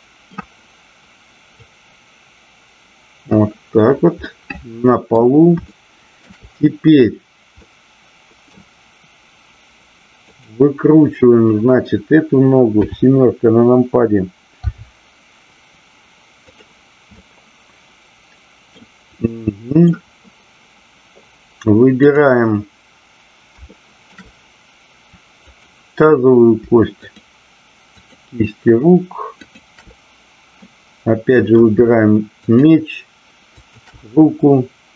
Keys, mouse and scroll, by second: 1.5-3.4 drag, 4.1 scroll up 1, 4.2-5.0 middle drag, 5.0 scroll down 1, 5.7-6.1 shift+middle drag, 7.5 scroll up 1, 7.7-8.5 middle drag, 10.3 click, 12.7 KP_7, 14.6 r, 16.4 click, 17.1-18.6 middle drag, 19.2-19.7 middle drag, 22.0-22.8 drag, 23.6-24.0 shift+middle drag, 25.5 click, 27.0-27.8 shift+drag, 28.0 shift+click, 29.5-30.1 shift+drag, 30.6-31.5 middle drag, 32.3-33.0 shift+drag, 33.5-34.3 shift+drag.